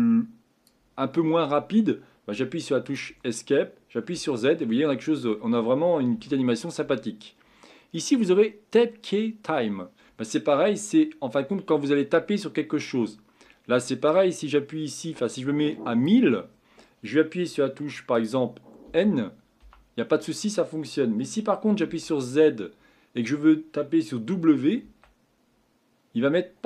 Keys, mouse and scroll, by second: 3.1 Escape, 4.1 z, 6.1 z, 10.1 Escape, 18.1 click, 18.8 n, 19.6 n, 21.9 z.